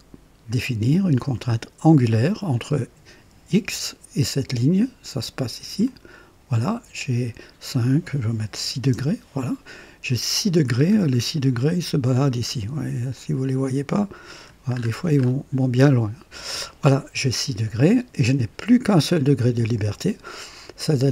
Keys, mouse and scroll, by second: 0.4 click, 2.4 click, 5.7 click, 8.5 KP_6, 8.8 KP_Enter, 10.6-11.7 scroll down 4, 11.8 scroll up 1, 13.0-14.6 drag, 14.7-15.4 scroll up 2, 15.8 right click.